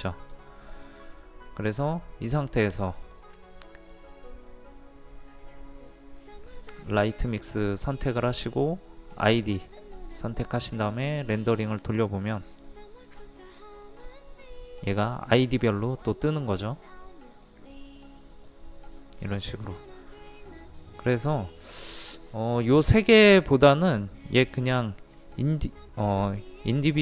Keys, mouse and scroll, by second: 0.3-27.0 drag.